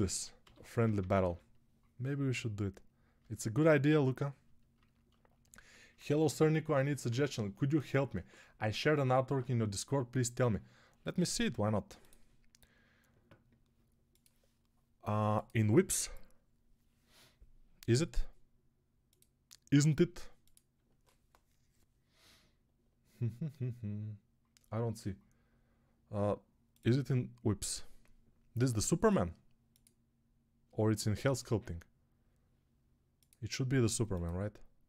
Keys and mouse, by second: 0.3-1.1 typing.